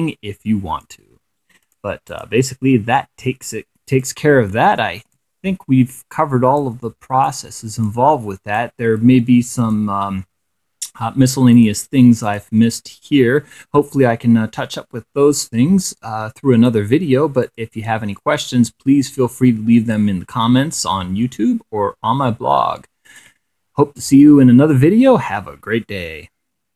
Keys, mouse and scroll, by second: 1.2 click, 1.6 click, 3.0 click, 3.6 click, 4.7-6.4 drag, 6.8 click, 7.4 click, 9.1 click, 11.1 click, 11.8 click, 13.1-16.4 drag, 17.0 click, 19.5-20.5 drag, 22.6 click.